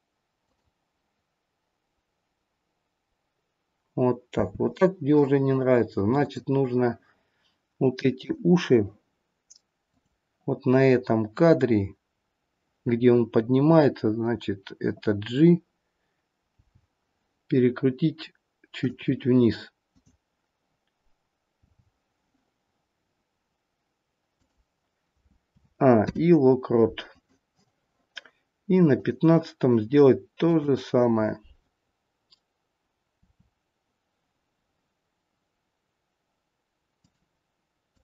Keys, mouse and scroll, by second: 0.4 click, 4.3 space, 6.1 click, 8.1 click, 9.8 click, 16.4 g, 19.9 click, 21.7 g, 25.5 a, 26.0 i, 28.9 click, 30.3 click, 33.2 r, 37.8 click.